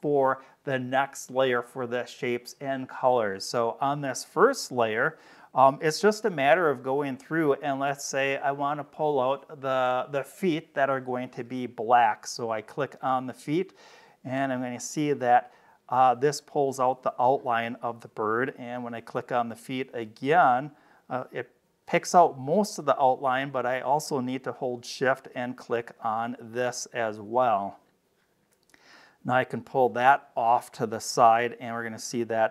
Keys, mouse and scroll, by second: 3.3 middle click, 3.3-4.7 scroll up 6, 4.5 middle click, 5.2 space, 5.4 click, 12.2 scroll up 2, 13.1 click, 14.7-17.1 drag, 19.8 click, 25.8 shift+click, 26.7-27.2 scroll down 2, 27.4 middle click, 29.5-31.4 drag.